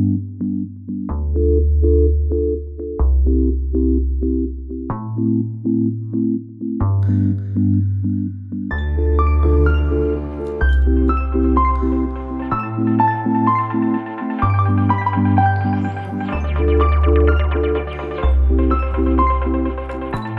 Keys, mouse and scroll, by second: 2.5 click, 4.7 ctrl+b, 12.9 click, 14.2 click, 15.0 click, 15.6 click, 16.8 click, 19.8 click.